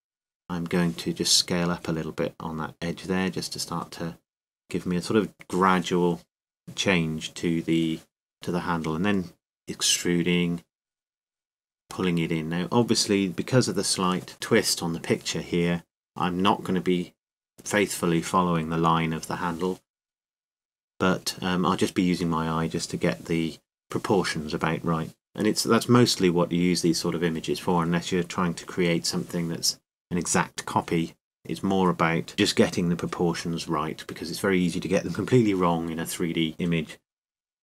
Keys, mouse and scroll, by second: 0.4 ctrl+z, 1.0 ctrl+z, 2.3 s, 7.7 click, 8.0 e, 10.4 click, 10.9 middle click, 11.7 middle click, 14.3 s, 16.2-17.6 drag, 17.2 middle click, 29.7 e, 32.1 e, 32.3 s, 34.0-35.8 middle drag, 36.5 e.